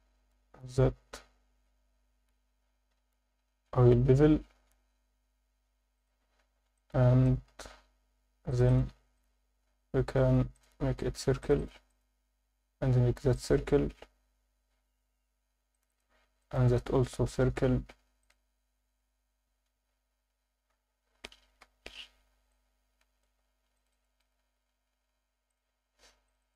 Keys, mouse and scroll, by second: 2.9 scroll down 4, 5.9 shift+click, 6.3 scroll down 2, 6.4 Tab, 6.7 alt+middle click, 7.4 scroll up 2, 7.6 Tab, 8.4 click, 8.7 click, 9.2-11.4 right drag, 11.4 click, 11.6 click, 11.9-14.4 right drag, 14.4 scroll up 1, 15.7 click, 15.7 scroll down 2, 16.4-19.0 right drag, 19.0 Tab, 19.4 scroll down 1, 21.6 KP_Divide, 21.6 scroll down 1, 22.2 Tab, 22.5 alt+middle click, 23.7 click, 23.9 click, 24.2-26.2 right drag, 26.2 click, 26.4 click.